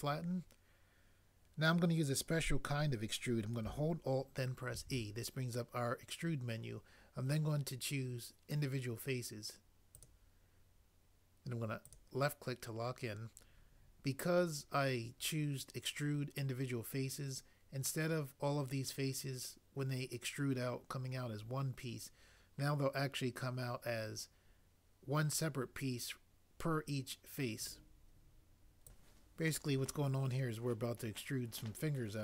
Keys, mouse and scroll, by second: 4.7 alt+e.